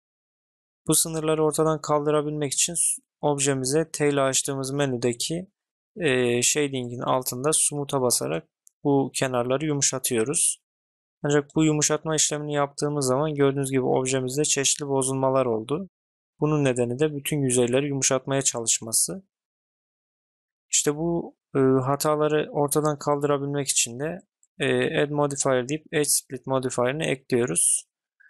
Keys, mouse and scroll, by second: 14.0-14.3 middle drag, 16.0 middle click, 16.8 middle click, 17.2 click, 23.1-26.0 drag, 27.8 click, 27.8-28.2 middle drag.